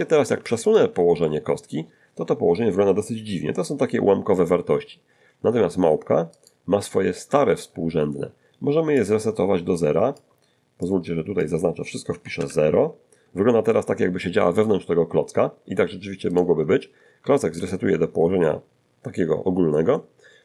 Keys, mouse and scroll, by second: 0.3 g, 0.7 click, 1.2 middle click, 6.4 right click, 9.0-10.4 drag, 10.9 click, 12.1 0, 12.4 Return, 16.3 right click, 17.6 alt+g, 18.4-20.4 alt+middle drag.